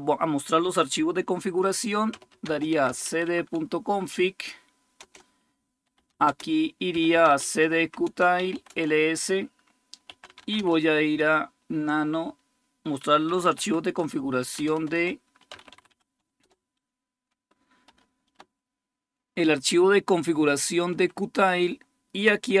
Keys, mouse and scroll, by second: 1.7-3.3 typing, 4.8 Return, 5.5-10.8 typing, 12.6-16.7 typing, 18.5 Down, 18.5-22.6 typing.